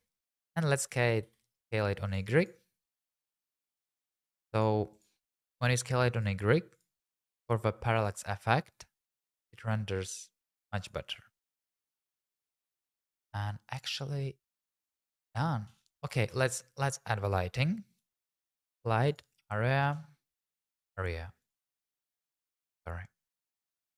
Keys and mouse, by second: 0.9 s, 1.2 y, 2.1 click, 3.2 s, 3.3 y, 4.2 click, 4.9 click, 5.3 s, 5.5 y, 6.1 click, 7.3 shift+click, 7.9 shift+click, 9.1 s, 9.4 y, 10.8 click, 12.0 shift+click, 15.9 click, 16.2 shift+a, 20.4 g, 20.5 z, 21.4 click, 21.7 `, 22.4 shift+z, 23.4 s.